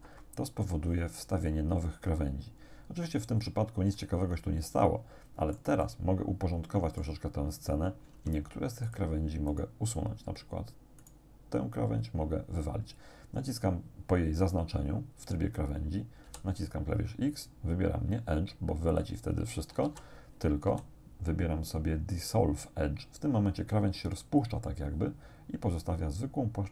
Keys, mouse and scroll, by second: 0.1 Return, 4.0-5.8 drag, 5.9-7.2 drag, 8.2 ctrl+Tab, 8.9 click, 9.5 right click, 11.0 right click, 16.3 x, 19.0 click, 19.9 ctrl+z, 20.7 x, 24.4 click.